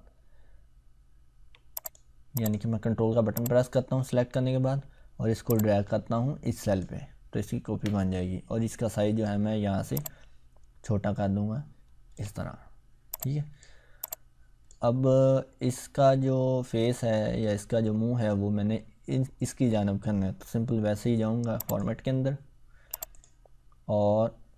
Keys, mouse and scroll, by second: 1.7-4.4 drag, 5.5-7.1 ctrl+drag, 13.1-13.8 click, 21.5 click.